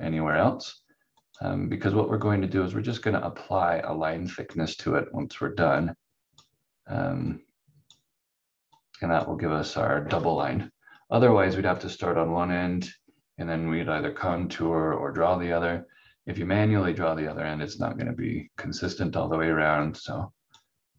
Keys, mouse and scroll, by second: 1.2 click, 17.3 click.